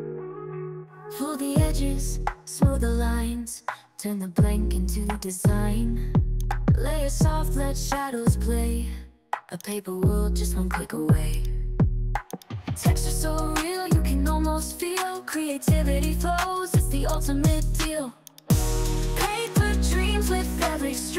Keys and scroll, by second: 3.4 ctrl+l.